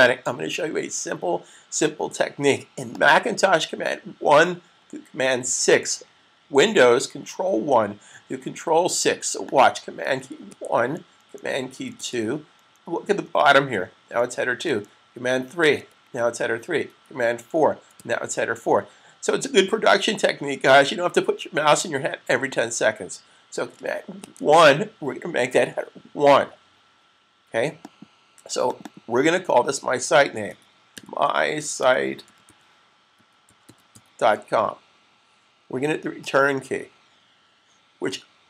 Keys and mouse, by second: 2.8 click, 9.3 click, 10.4 super+1, 11.8 typing, 15.7 3, 27.7 click, 28.8 double click, 30.4-34.3 typing.